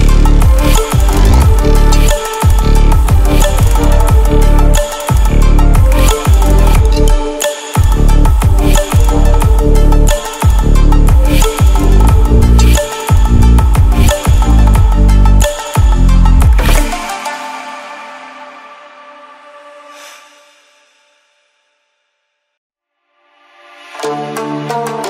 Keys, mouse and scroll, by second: 2.1-2.8 drag, 5.5 alt+shift+drag, 5.8-7.9 alt+shift+drag, 10.3-11.6 drag, 20.5 Delete, 24.0 click.